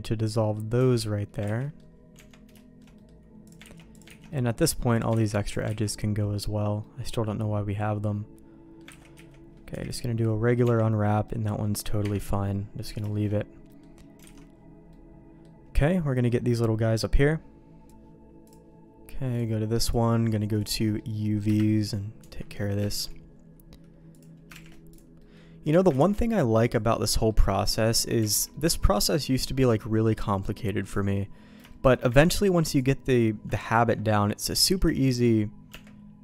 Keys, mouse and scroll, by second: 0.3 middle click, 0.7 Tab, 1.4 ctrl+s, 1.6 middle click, 2.1 Tab, 2.5 shift+middle click, 2.9 middle click, 3.4 click, 3.7 ctrl+x, 4.0 ctrl+x, 4.2 middle click, 4.9 click, 5.1 ctrl+x, 5.4 click, 5.7 ctrl+x, 5.9 middle click, 6.8-8.7 middle drag, 8.9 ctrl+s, 9.1 a, 9.7 u, 10.2 middle click, 10.6 Tab, 11.2 middle click, 12.0 KP_Divide, 13.0 shift+middle click, 13.6 middle click, 14.2 alt+a, 14.8 middle click, 18.4 click, 19.3 click, 20.8 middle click, 21.4 KP_Divide, 22.1 Tab, 22.5 middle click, 22.8 shift+middle click, 24.1 click, 24.7 shift+g, 25.1 middle click, 25.9 ctrl+e, 27.1 middle click, 27.5 middle click, 28.2 alt+a, 28.4-30.3 middle drag, 30.8 click, 31.6 shift+middle click, 32.7 ctrl+click, 33.7 ctrl+e, 35.6 Tab.